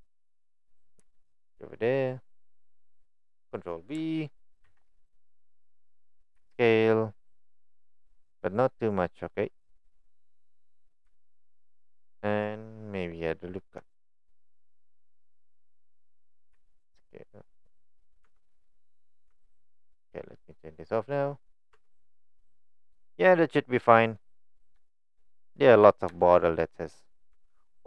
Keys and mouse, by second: 1.0 s, 4.6 ctrl+b, 6.4 s, 18.0 click, 18.3 Tab, 18.7-19.1 middle drag, 19.3 Tab, 20.9 click, 21.5 middle click, 21.7 Tab, 22.2 click, 22.4-24.2 middle drag, 24.8 shift+middle drag, 25.3 middle drag, 26.2 shift+middle click, 27.4 Tab.